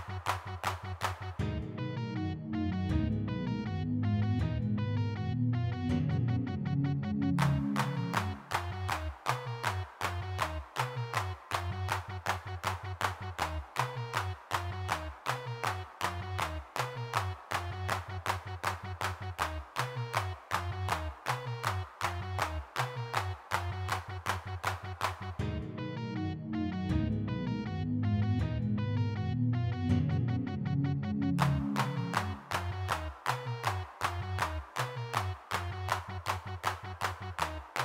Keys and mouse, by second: 1.3 click, 1.8 middle click, 2.7 click, 3.0 middle click, 3.9-5.5 middle drag, 7.1 g, 7.2 f, 7.4 click, 9.0-10.3 middle drag, 10.3 click, 11.2 middle click, 11.8 middle click, 13.6-17.4 middle drag, 23.2 3, 23.3 f, 23.5 middle click, 26.0-29.0 middle drag, 29.7-33.4 middle drag, 34.6 middle click, 35.0 f, 35.8 middle click, 36.0-37.8 drag.